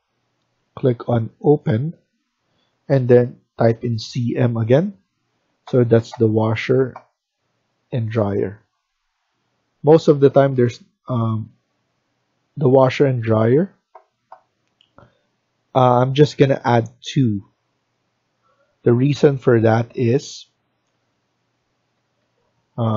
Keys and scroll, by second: 3.5-4.1 typing, 21.6 Escape, 21.9 Escape, 22.1 Escape.